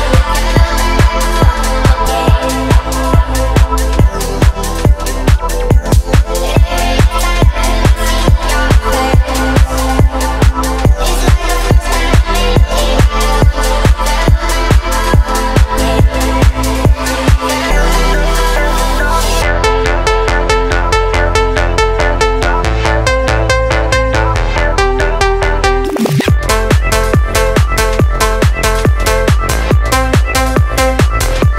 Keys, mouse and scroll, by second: 2.9 g, 3.8 z, 7.3 KP_4, 8.0 click, 8.4-8.7 scroll up 1, 8.8-9.1 shift+middle drag, 9.1-10.7 scroll up 1, 10.9 s, 12.9 click, 14.7-20.1 drag, 21.9-22.7 right drag, 24.4-25.0 shift+middle drag, 26.1 click, 27.0 shift+a, 30.5-31.5 drag.